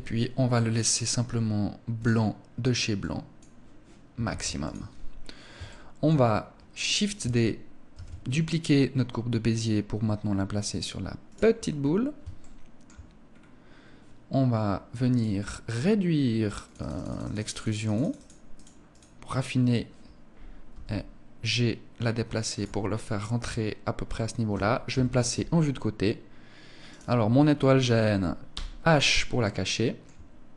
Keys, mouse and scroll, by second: 0.2 click, 3.8 ctrl+s, 5.1 shift+middle click, 5.7 scroll up 2, 6.8 scroll up 1, 10.8 click, 11.0-11.5 scroll up 7, 11.9 shift+middle click, 12.8 scroll up 2, 14.6 click, 16.1 click, 16.4 click, 16.5 click, 16.9 click, 17.0 click, 17.3 click, 17.5 click, 18.4 click, 20.4 g, 22.1 click, 24.4 KP_3, 26.3 right click, 28.0 h, 28.9 shift+middle click, 29.1 shift+middle click, 30.1 middle click.